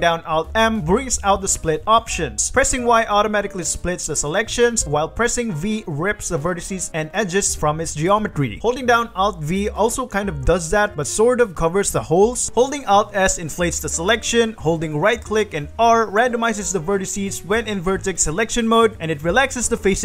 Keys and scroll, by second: 0.9 alt+m, 1.8 g, 2.4 Escape, 3.1-5.4 typing, 6.6 Escape, 6.6 g, 9.8 alt+v, 15.3 1, 15.6 r, 18.5 3, 19.3 r.